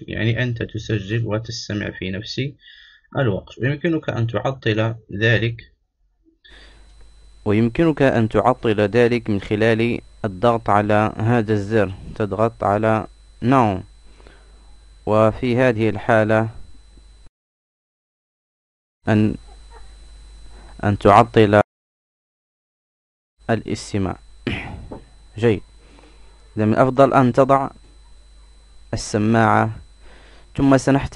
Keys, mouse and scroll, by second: 5.9-7.4 drag, 12.5 right click, 14.8-16.5 right drag, 18.3-20.5 right drag, 22.7-25.6 right drag.